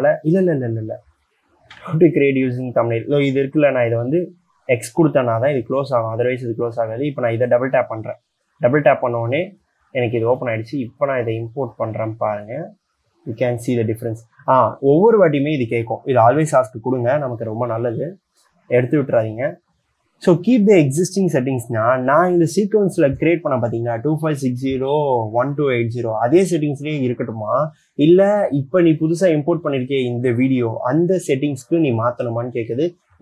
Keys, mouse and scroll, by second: 2.0 c, 7.1 double click.